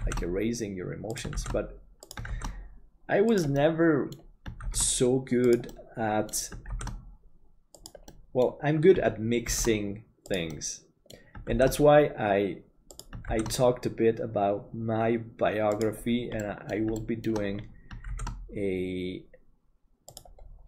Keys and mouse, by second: 3.6 middle click, 5.8 middle click, 8.1 middle click, 10.6 middle click, 16.5 middle click, 17.0 shift+middle click, 18.2 shift+d.